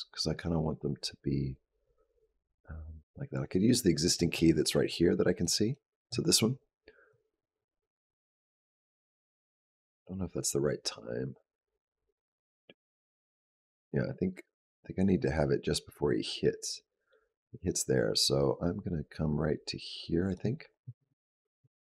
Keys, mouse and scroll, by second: 5.2 click, 5.5 click, 7.0 click.